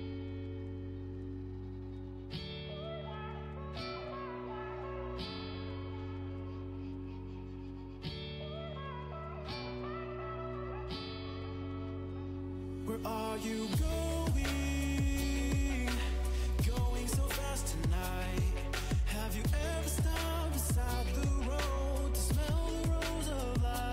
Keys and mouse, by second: 0.9-2.0 drag, 3.1 ctrl+e, 12.8 click, 12.8 right click, 14.4 ctrl+r, 17.5 click, 18.4 ctrl+r, 18.8-20.6 drag, 21.6 Tab.